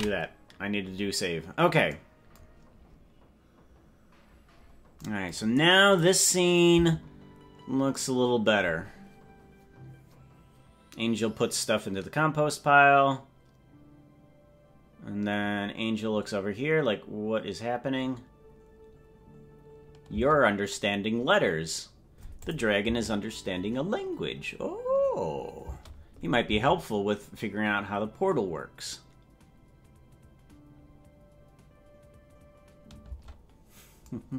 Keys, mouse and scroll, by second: 3.2 ctrl+s, 3.8-5.0 scroll down 10, 5.9 click, 6.8 space, 20.1 space, 22.4 click, 22.9 space, 25.7 space, 26.5 space, 33.2 space.